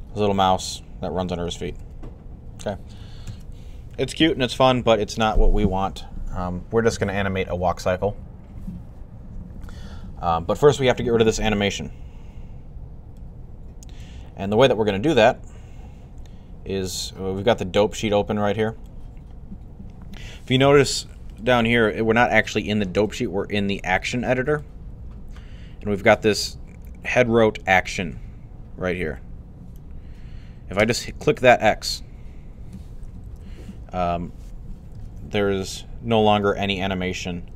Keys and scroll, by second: 1.1 alt+a, 1.6 alt+a, 3.1 alt+a, 33.1 Left, 34.8 alt+a.